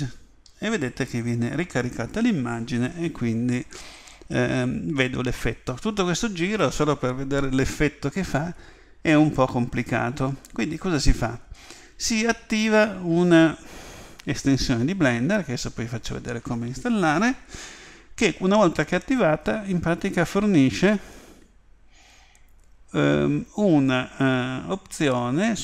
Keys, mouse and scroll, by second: 20.9 click.